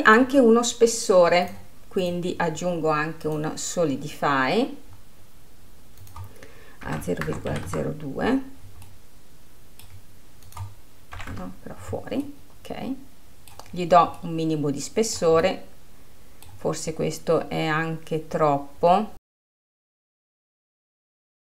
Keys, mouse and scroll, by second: 2.0-5.8 drag, 6.6-9.5 drag, 9.5-11.1 middle drag, 11.1-12.8 drag, 12.8-14.4 middle drag, 14.4-14.8 scroll up 1, 14.8-18.0 middle drag, 18.0-19.3 scroll up 2, 19.3-20.0 scroll down 2, 20.0-21.5 drag.